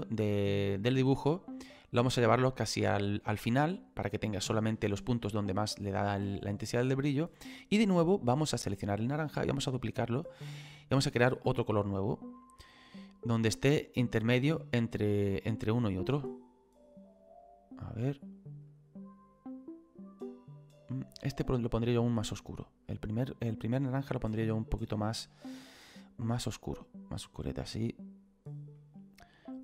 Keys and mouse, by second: 5.0 middle click, 6.0 shift+middle click, 8.5 click, 9.6 click, 12.6 click, 15.2 click, 18.7 click, 21.7 click, 26.5 click, 29.5 click.